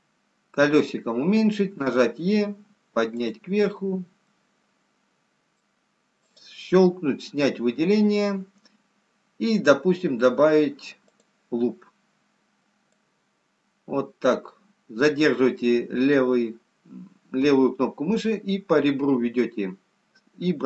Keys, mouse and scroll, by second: 0.6 scroll down 3, 1.6 e, 4.4 middle click, 7.0 click, 7.0-7.4 scroll up 2, 7.7-8.4 scroll up 1, 11.2 click, 14.6 click.